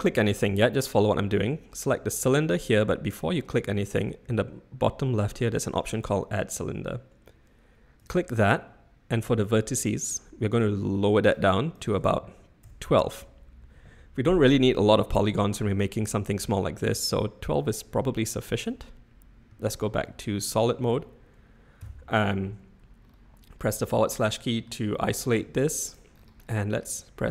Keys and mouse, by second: 10.6 click, 11.7-13.2 drag, 18.6 Tab, 19.5 z, 21.8 /, 23.6-24.6 middle drag, 25.3 g.